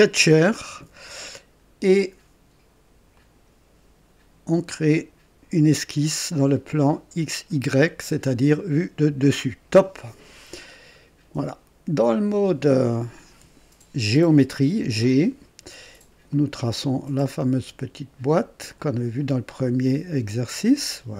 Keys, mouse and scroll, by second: 0.1 click, 1.3 scroll down 1, 3.1 click, 7.8 click, 10.7 right click, 14.7 click, 16.2 click, 18.7 click, 20.4 click.